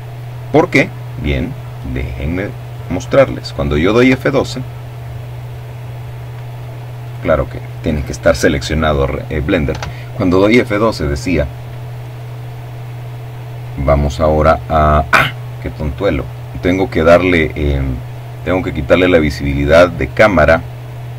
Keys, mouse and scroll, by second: 0.2-1.7 drag, 2.4 F12, 5.5 right click, 8.1 F12, 21.1 click.